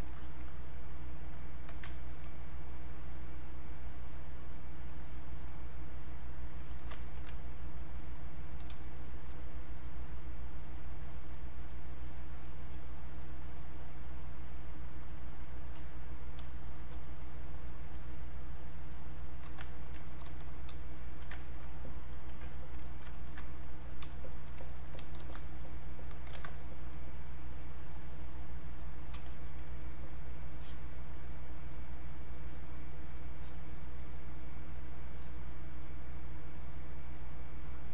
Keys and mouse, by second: 0.1 alt+click, 2.0 ctrl+right click, 2.9-4.4 drag, 6.7 alt+click, 7.0 ctrl+right click, 7.6 click, 8.7 space, 9.0 click, 9.3 space, 9.6 click, 16.5 space, 16.8 click, 19.0 click, 19.7 ctrl+right click, 20.2 click, 20.9 alt+click, 21.4 ctrl+right click, 22.1 alt+click, 23.1 ctrl+alt+right click, 24.3 alt+click, 25.2 ctrl+d, 25.6 click, 26.3 ctrl+z, 26.9 click, 30.6 click, 37.6 click.